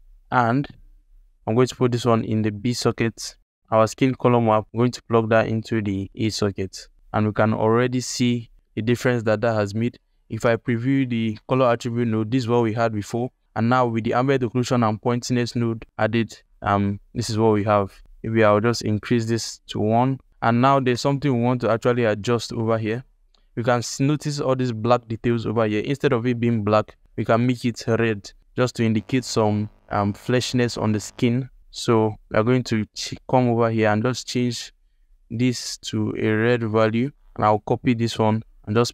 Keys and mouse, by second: 1.9-2.9 drag, 3.6 Escape, 3.7-5.2 drag, 11.0 ctrl+shift+click, 13.9 click, 16.4 ctrl+shift+click, 18.7-20.3 drag, 21.7 alt+shift+click, 22.7 alt+shift+click, 31.4 click, 37.7 ctrl+c, 37.9 ctrl+c.